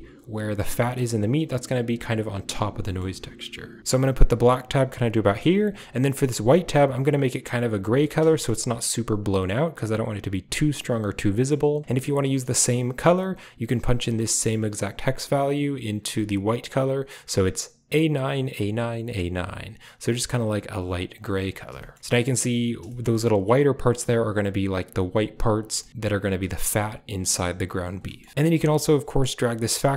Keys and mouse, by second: 0.7 shift+click, 2.7 middle click, 4.0-4.9 drag, 5.6 click, 6.3 ctrl+v, 8.2 shift+drag, 9.2 click, 11.2 click, 20.8 click, 22.7 shift+click, 25.7 shift+middle drag, 26.3 shift+middle click, 27.1 middle click, 27.6 click, 27.9 middle click, 28.3 ctrl+z, 28.3-29.9 drag.